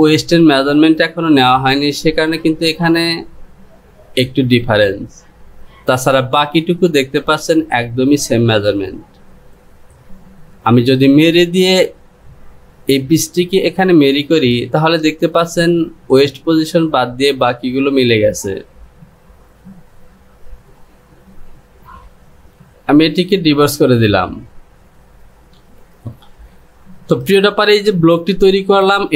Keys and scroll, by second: 25.8 j.